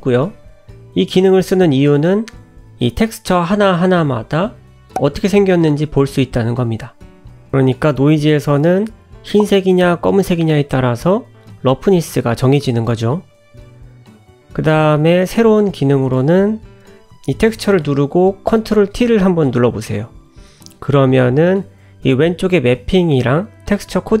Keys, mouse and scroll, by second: 18.4 ctrl+t.